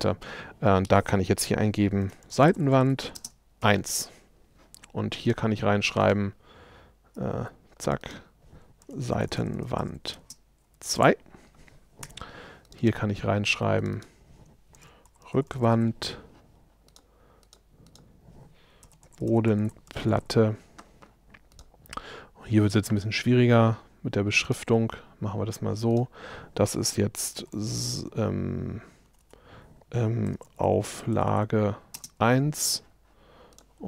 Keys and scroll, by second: 7.4 Escape, 8.9 shift+s, 27.4 shift+s, 29.1 BackSpace.